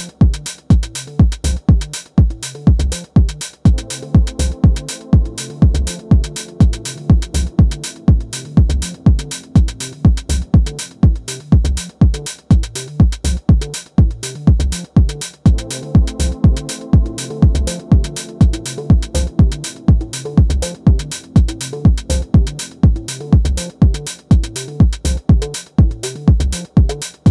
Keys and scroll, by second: 7.2 space, 8.4 space, 13.1 super+z.